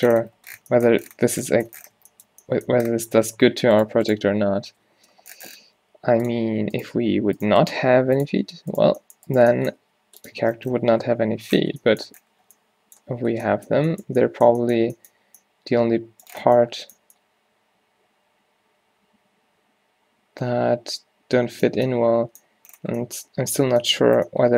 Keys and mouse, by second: 3.8-5.7 drag, 4.9 -, 6.0 g, 6.9 click, 6.9 g, 8.0 g, 9.8 g, 10.4 Tab, 11.8 a, 19.1-20.6 middle drag, 21.2 middle click.